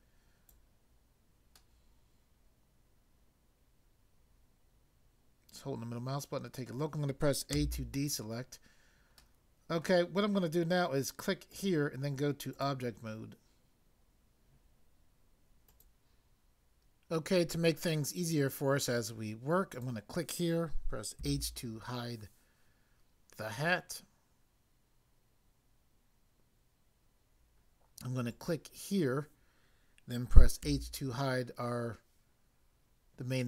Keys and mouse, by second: 1.6 middle click, 7.5 a, 9.2 middle click, 11.5 click, 12.5 click, 15.6 click, 19.7 click, 21.1 h, 28.3 click, 30.7 h.